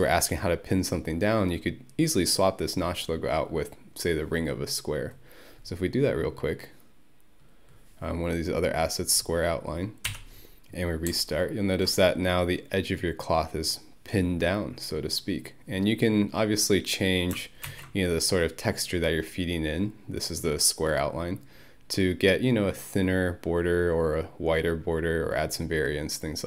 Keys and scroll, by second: 10.1 Home, 17.7 ctrl+F1.